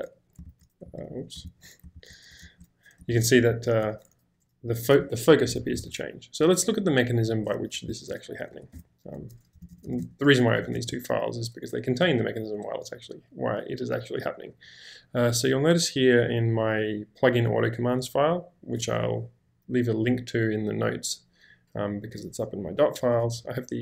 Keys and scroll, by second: 1.0 BackSpace, 1.4 ctrl+k, 2.0 ctrl+m, 2.4 ctrl+h, 3.1 ctrl+j, 3.5 ctrl+k, 7.9 ctrl+l, 8.6-10.0 typing, 10.7 ctrl+j, 12.5 k, 12.7 k, 12.9 k, 14.5 k, 15.3 k, 18.0 k, 23.0-23.8 typing.